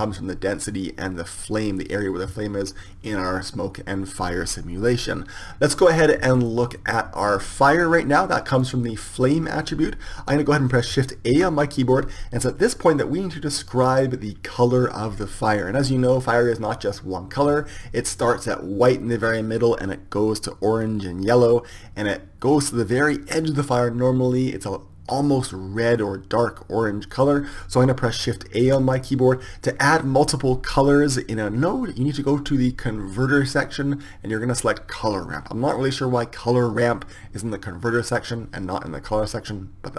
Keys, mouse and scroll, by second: 8.5-10.3 drag, 11.3 shift+a, 28.9 shift+a.